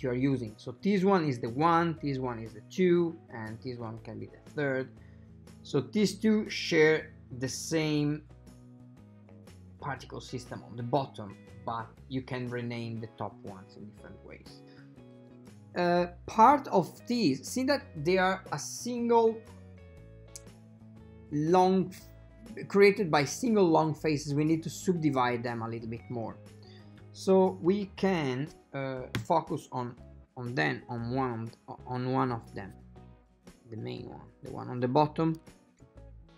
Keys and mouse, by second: 14.6 click, 26.3 right click, 29.3 /, 33.5-35.6 shift+middle drag.